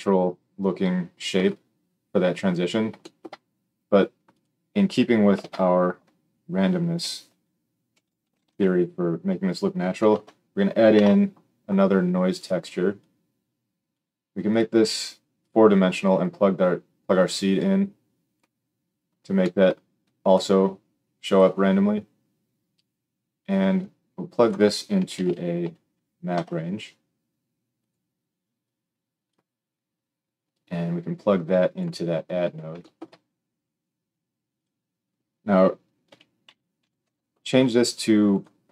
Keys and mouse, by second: 4.4-13.0 middle drag, 5.3 shift+a, 13.0-27.8 drag, 27.8-28.6 middle drag, 28.6-38.7 drag.